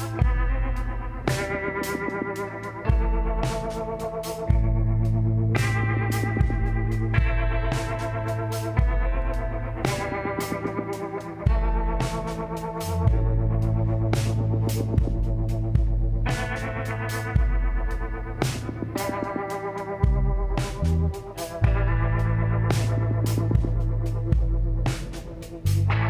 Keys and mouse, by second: 2.8-4.9 middle drag, 4.9 z, 6.4 l, 7.5-8.8 middle drag, 8.8 s, 11.2 KP_1, 13.5 s, 16.1-17.9 drag, 17.5 s, 19.9 KP_1, 23.1-24.6 drag, 24.8 z, 25.4 b.